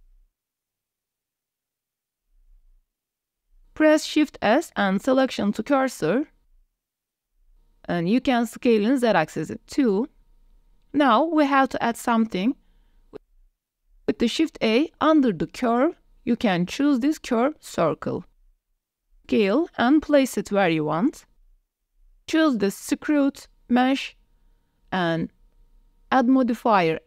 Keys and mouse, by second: 0.9 click, 1.6 shift+middle drag, 2.3 s, 3.1 shift+middle click, 3.9 shift+s, 6.9 shift+middle click, 7.1 middle click, 8.2 shift+drag, 8.6 drag, 9.5 shift+drag, 9.7 click, 10.1 s, 10.4 z, 11.7 drag, 12.2 drag, 12.6 shift+drag, 13.9 shift+a, 17.9-18.2 drag, 18.6 g, 18.7 z, 19.1 shift+click, 19.4 s, 20.7 drag, 21.3 click, 21.5 s, 21.7 g, 21.7 z, 22.3 click, 23.0 click, 26.7-27.0 drag.